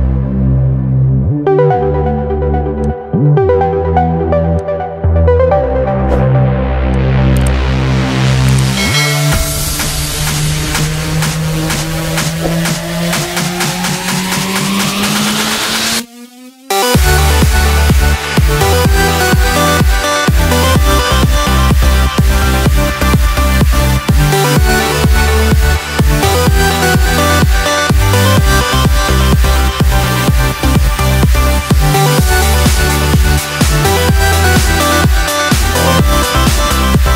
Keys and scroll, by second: 25.4 ctrl+BackSpace, 30.1 ctrl+d.